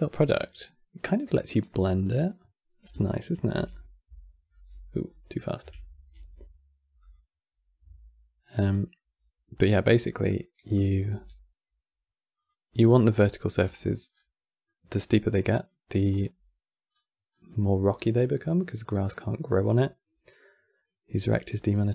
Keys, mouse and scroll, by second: 1.6-2.0 scroll up 10, 3.2 shift+f, 9.6 scroll down 5, 9.8 middle click, 10.5 click, 10.8 g, 12.6-14.0 scroll down 18, 14.3 middle click, 15.3 click, 21.1 click, 21.5 scroll down 2, 21.7-21.9 middle drag.